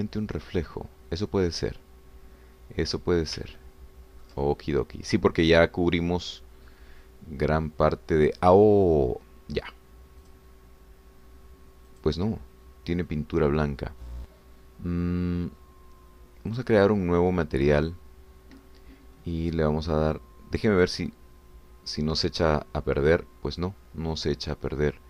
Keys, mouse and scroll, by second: 0.2 scroll down 1, 0.6-4.5 middle drag, 4.5-9.3 ctrl+drag, 11.3 click, 12.9 click, 17.5 click, 21.7 click.